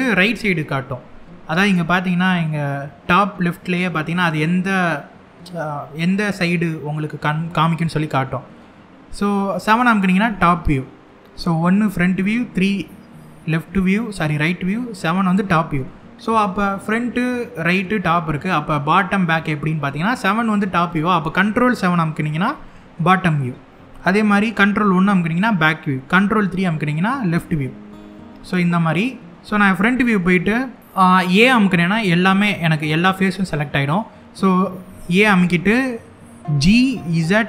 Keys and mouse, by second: 9.9 KP_7, 12.8 KP_3, 14.9 KP_7, 21.5 ctrl+KP_7, 24.4 ctrl+KP_1, 26.1 ctrl+KP_3, 29.5 KP_1, 31.4 a, 31.9 middle click, 33.0 middle click, 34.9 KP_1, 36.1 g, 36.8 z.